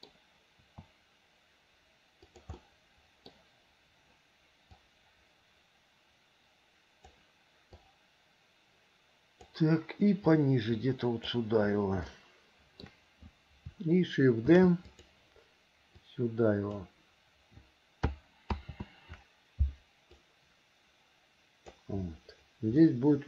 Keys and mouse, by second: 0.0 click, 0.0 right click, 0.8 s, 2.7 middle click, 4.9 click, 5.5-7.3 drag, 8.0-9.7 drag, 10.5-11.5 drag, 12.3 shift+middle click, 14.7 shift+d, 16.3 click, 18.7 ctrl+z, 20.4-21.9 drag, 23.0 middle click.